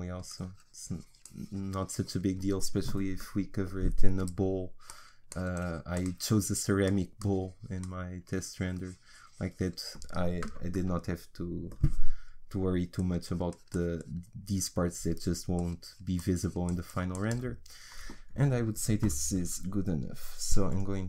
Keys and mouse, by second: 4.9-10.7 drag, 13.0-19.7 drag, 19.7 Tab.